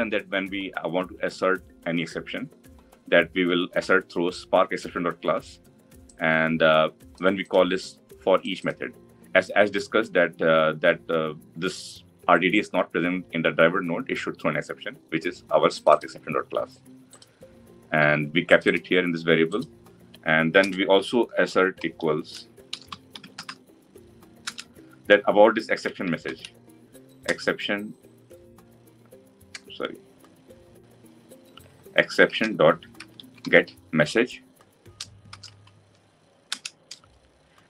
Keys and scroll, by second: 24.2 Return, 36.3 Return.